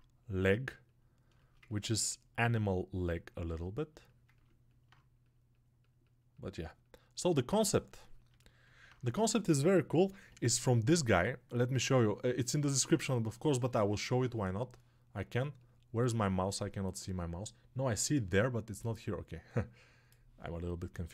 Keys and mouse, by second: 2.2-21.1 drag.